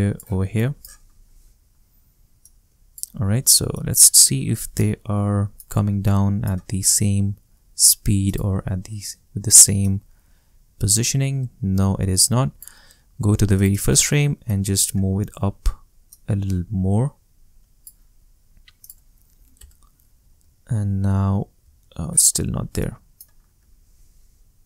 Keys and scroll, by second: 18.7 shift+0, 18.8 shift+Return, 18.9 shift+space, 19.2 shift+space, 21.3 shift+BackSpace, 21.7 shift+super+z, 22.0 shift+BackSpace, 23.6 shift+space, 24.1 shift+super+z.